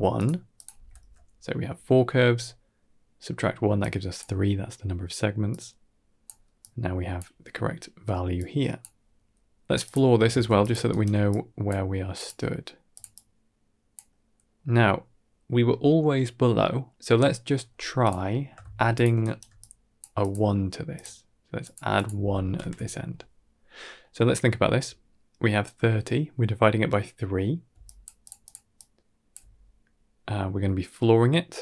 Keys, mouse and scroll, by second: 0.4 click, 3.7 click, 5.4-6.1 drag, 6.4 click, 8.3 click, 9.1-9.5 scroll down 2, 9.2 middle click, 9.7 click, 10.2 shift+d, 10.7 alt+right drag, 11.1 click, 12.0-12.9 drag, 13.1 click, 14.2 middle click, 17.9 click, 18.2 middle click, 18.5 shift+d, 19.1 alt+right drag, 19.4 click, 20.1-20.9 drag, 21.5 click, 21.8 click, 23.9 middle click, 27.6-29.2 typing, 27.7 click, 28.1 click, 28.3 click, 28.6 click.